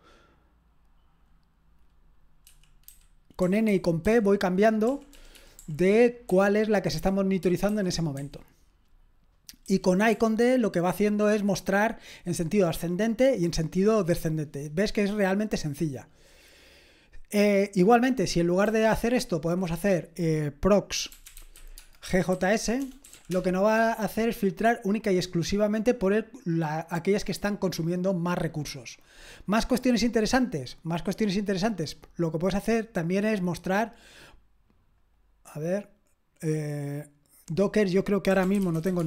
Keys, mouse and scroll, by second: 2.4-8.2 typing, 9.6-10.1 typing, 18.6 typing, 20.7-23.6 typing, 29.7-31.5 scroll down 1, 31.5-34.0 scroll down 1, 34.0-35.2 scroll down 1, 35.2-38.3 drag, 38.1-39.0 typing.